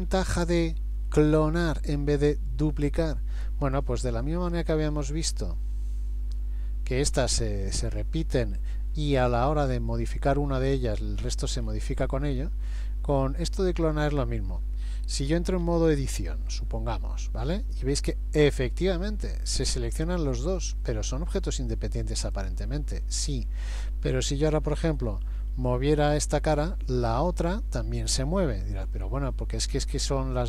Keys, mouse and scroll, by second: 0.2 shift+middle click, 1.3 middle click, 3.9-5.2 scroll down 6, 5.2-5.7 scroll up 1, 5.7 scroll down 1, 6.3-7.2 scroll down 2, 7.6-8.3 scroll down 1, 11.7-13.4 scroll up 11, 13.4-13.9 scroll down 1, 14.0 click, 15.7 Tab, 16.5 middle click, 17.9 shift+middle click, 20.3 middle click, 22.2 click, 23.1 click, 24.5 g, 29.6 middle click.